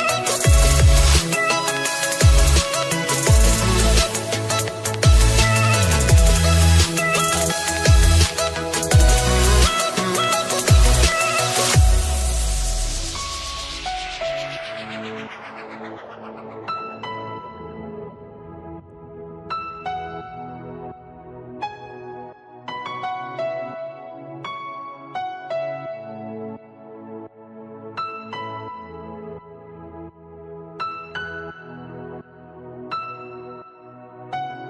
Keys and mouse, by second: 1.2 click, 2.7 click, 4.1 click, 5.1 click, 8.7 click, 10.4 click, 11.9 click, 16.7 click, 22.2 click, 25.9 click, 27.1 click, 29.0 click, 30.6 click, 31.5 click, 31.8 click, 33.2 click.